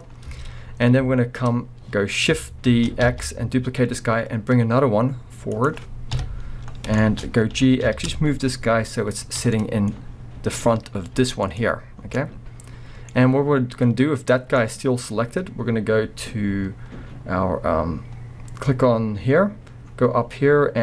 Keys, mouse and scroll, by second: 0.3 Tab, 0.7-1.5 scroll up 2, 1.5-2.2 scroll down 2, 2.2-2.7 scroll up 2, 2.7 shift+d, 5.7 click, 7.2-7.6 scroll, 7.6 g, 9.4 scroll, 9.5-10.0 middle drag, 10.0 scroll, 10.6-11.6 middle drag, 11.2 g, 11.6-12.0 right drag, 12.0 scroll, 12.2-14.4 middle drag, 14.4 scroll, 14.6-15.2 middle drag, 15.2 scroll, 15.3-20.8 middle drag, 15.9-19.2 scroll up 2, 19.9-20.8 scroll.